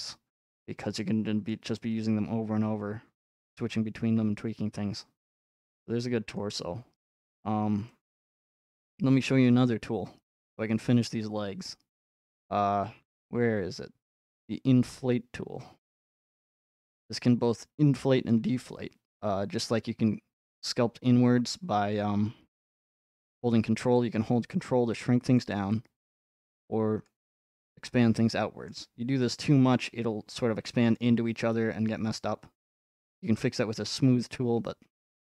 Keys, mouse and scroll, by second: 1.5-3.5 drag, 3.5 middle click, 3.8-4.2 scroll up 1, 6.4 click, 6.7 scroll up 2, 7.7 scroll up 1, 8.7 middle click, 10.4 middle click, 10.5 middle click, 16.3 click, 18.3 shift+middle click, 18.7-20.2 scroll up 1, 25.4 ctrl+click, 27.1 ctrl+click, 28.7-29.9 middle drag, 31.5-33.0 drag, 31.5 middle click.